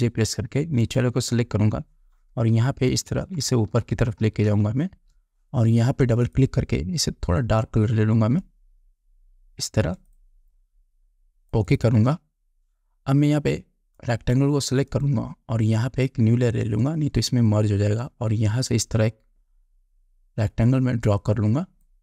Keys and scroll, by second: 0.1 ctrl+j, 3.3 shift+Up.